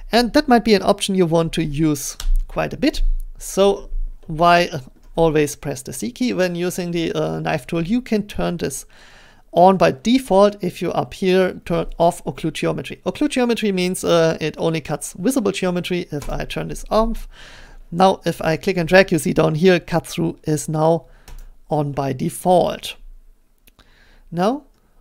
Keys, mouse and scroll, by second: 2.2 Return, 5.0 scroll, 16.3 click, 18.3 click, 24.4-25.0 scroll.